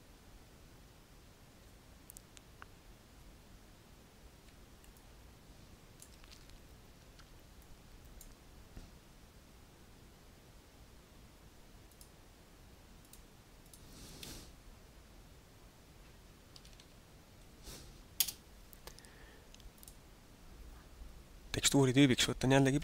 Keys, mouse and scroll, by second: 4.4 alt+a, 4.9 middle click, 7.6 click, 12.0 click, 13.1 click, 13.7 click, 19.7 click.